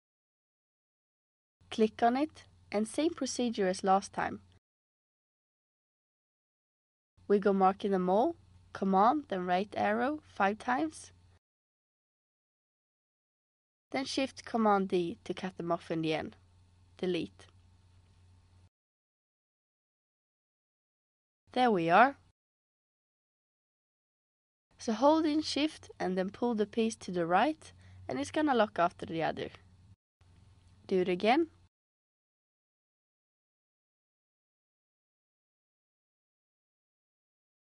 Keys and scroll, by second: 9.3 super+Right, 9.7 super+Right, 10.0 super+Right, 14.8 shift+super+d, 16.6 BackSpace, 31.8 super+c, 32.4 super+d.